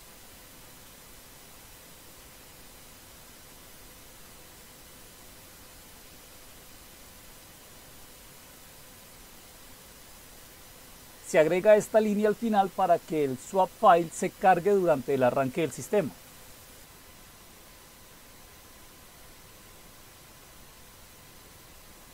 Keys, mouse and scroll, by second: 0.0-6.7 typing, 8.0 typing, 9.3-21.5 typing.